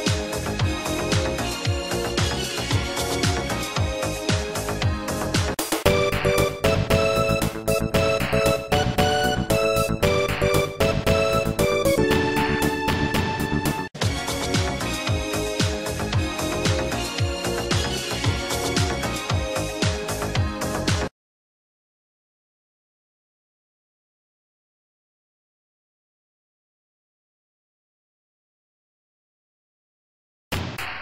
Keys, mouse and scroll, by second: 13.9 c, 14.2 click, 18.9 right click, 21.2 ctrl+s, 21.4 click, 22.3-23.7 typing, 24.3 click.